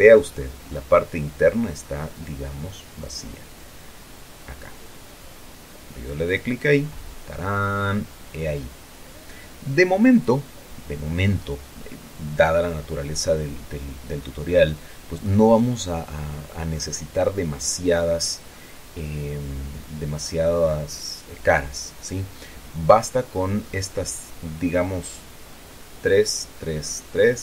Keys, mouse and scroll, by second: 0.9 middle click, 1.1 click, 1.8-3.5 middle drag, 6.6 click, 7.4-12.1 middle drag, 13.7-14.5 scroll down 1, 14.6-15.8 drag, 15.8 middle click, 15.9-16.3 scroll up 1, 16.5 scroll up 1, 23.5 click, 24.2-27.4 middle drag.